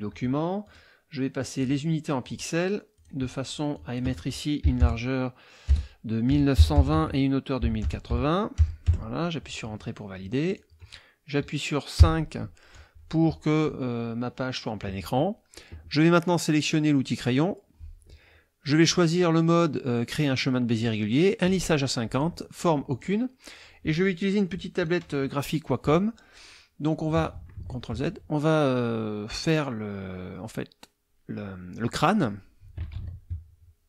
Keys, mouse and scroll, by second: 0.6 click, 1.6 click, 2.2 click, 2.9 click, 3.8 click, 4.6-6.8 typing, 6.9 Tab, 7.8 KP_0, 8.1 KP_8, 8.6 KP_0, 8.8 KP_Enter, 10.5 click, 12.0 KP_5, 17.2 click, 22.1 click, 22.9 click, 26.4 click, 27.6 ctrl+z, 32.1 click, 32.9 ctrl+z.